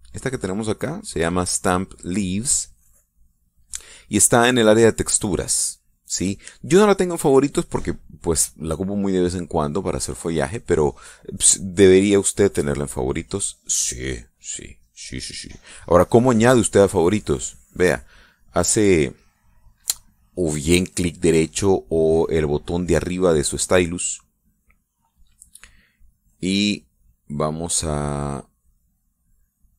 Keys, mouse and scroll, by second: 24.4 right click, 25.2-29.7 right drag.